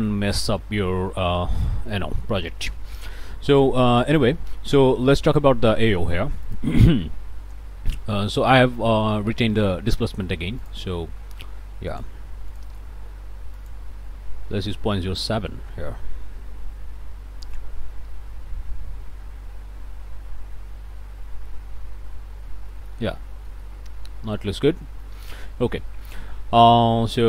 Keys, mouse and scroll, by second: 1.0 middle click, 1.6 click, 2.2 scroll up 2, 2.7 click, 4.5 click, 5.2 middle click, 5.7 click, 6.4 ctrl+shift+click, 7.5 click, 8.2 middle click, 8.2-8.7 scroll up 2, 8.5 middle click, 8.9 click, 10.0 click, 10.6 click, 11.9 click, 12.5 click, 13.5 click, 14.4 ., 14.6 0, 14.9 7, 15.2 Return, 21.4 click, 22.0 middle click, 22.7 shift+click, 23.1 shift+middle click, 23.4 middle click, 24.0 scroll up 1, 24.3 shift+middle click, 25.7 middle click, 26.3 scroll up 1, 26.6 shift+middle click.